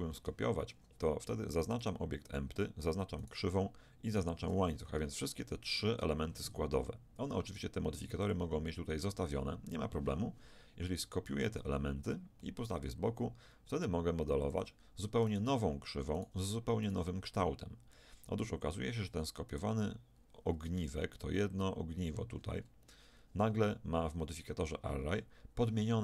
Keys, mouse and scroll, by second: 1.8-4.0 drag, 4.8 z, 8.2-11.0 drag, 11.3 shift+d, 15.3-19.2 right drag, 19.5-21.4 right drag, 20.6 Tab, 22.0 right click, 23.1 middle click, 23.8 Tab, 23.8 click, 24.6 middle click.